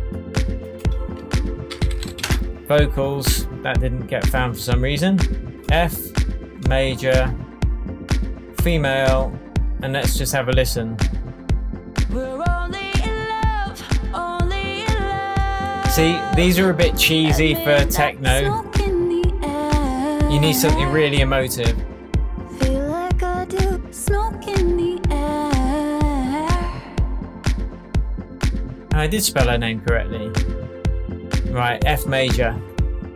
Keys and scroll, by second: 1.4-2.6 typing.